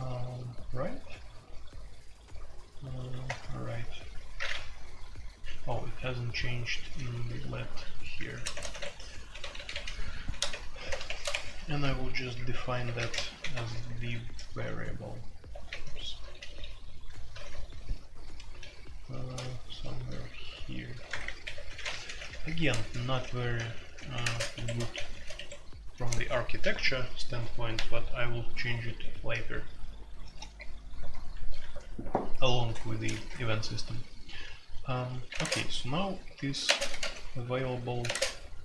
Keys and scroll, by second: 3.2 Return, 4.9-25.3 typing, 17.7 ctrl+u, 21.1 Return, 21.2 Return, 21.4 Escape, 31.3 Escape, 31.6 F2, 35.3 space, 35.4 Tab, 36.6-37.0 typing, 38.0 typing, 38.1 Tab.